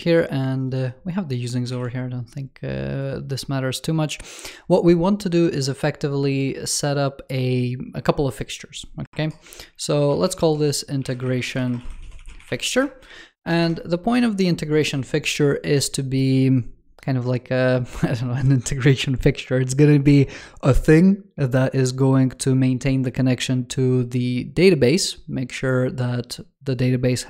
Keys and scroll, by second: 1.6 super+w.